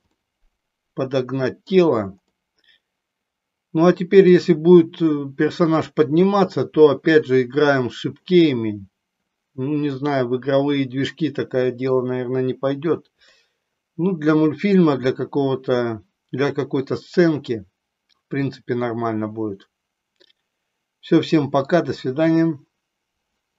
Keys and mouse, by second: 0.2-1.9 middle drag, 2.4-4.2 middle drag, 10.0-12.0 middle drag, 13.4-21.6 middle drag.